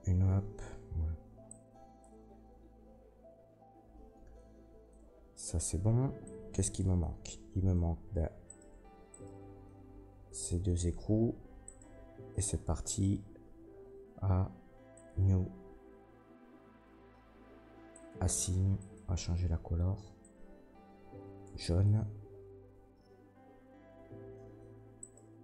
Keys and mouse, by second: 4.9 Tab, 8.4 middle click, 8.4 right click, 8.7 Tab, 9.1 middle click, 9.1 right click, 11.6 shift+click, 11.6 shift+right click, 12.3 Tab, 13.4 a, 19.0-25.0 middle drag, 24.6 Tab, 25.0 click, 25.1-25.4 middle drag.